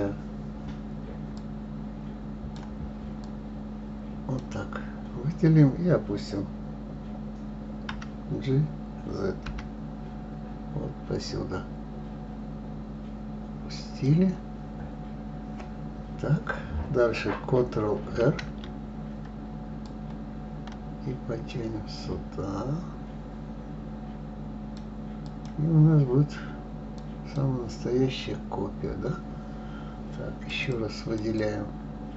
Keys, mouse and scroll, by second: 1.3-3.3 drag, 7.9 g, 15.0-17.9 scroll up 1, 18.1 ctrl+r, 26.9 click, 30.5-32.1 drag.